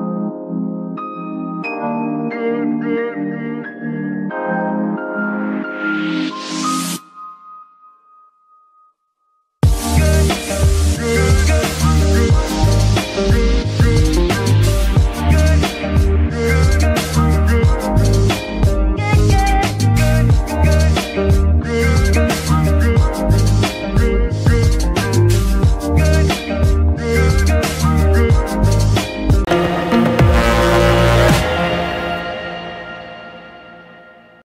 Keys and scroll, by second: 2.5 n, 6.7 ctrl+Tab.